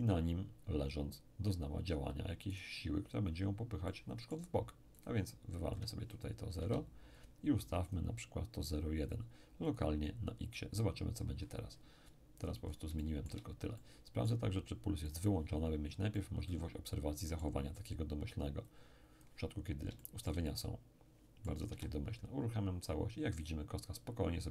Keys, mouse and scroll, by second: 2.5 right click, 3.8-6.8 middle drag, 5.0 click, 6.6 0, 7.2 click, 9.7 click, 12.0-12.4 scroll down 1, 12.4-12.9 scroll up 1, 12.9 shift+scroll up 1, 13.0-18.4 shift+middle drag, 15.1 shift+click, 18.7 click, 19.6-20.0 scroll down 1, 20.0-22.4 shift+middle drag, 21.7 p.